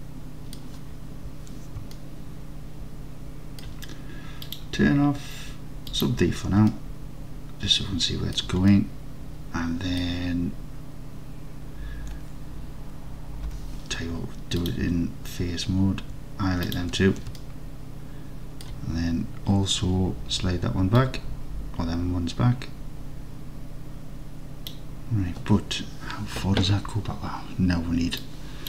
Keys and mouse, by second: 2.0-3.7 alt+middle drag, 4.5 click, 6.0 click, 6.8 alt+click, 6.9 alt+click, 8.8-10.1 alt+drag, 13.6 3, 16.7 ctrl+click, 17.4-18.7 alt+drag, 21.0 click.